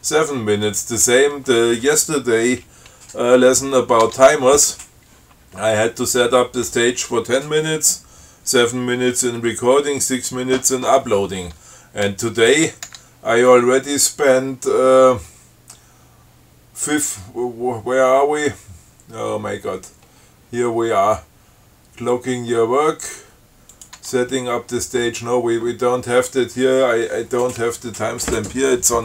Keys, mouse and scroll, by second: 0.9 click, 4.3 Tab, 12.7 click, 13.2 Tab, 20.2 scroll up 2, 24.0 click, 24.3 Tab.